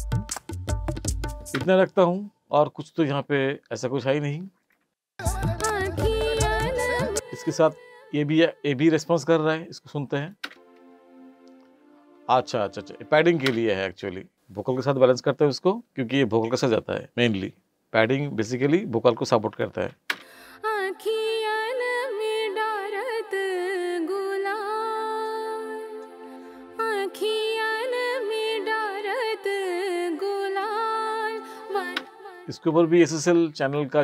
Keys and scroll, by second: 1.6 space, 5.1 space, 7.1 space, 10.4 space, 13.5 space, 20.1 space, 32.0 space.